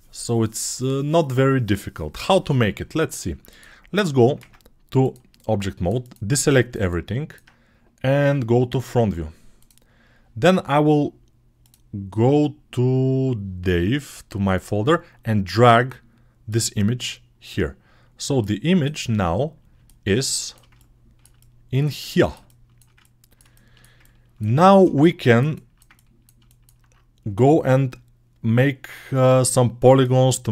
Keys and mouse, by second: 4.2 ctrl+Tab, 5.0 ctrl+alt+middle click, 5.9-7.3 right drag, 7.3-23.2 drag, 23.2-24.8 alt+shift+right drag, 24.8-26.2 ctrl+alt+drag.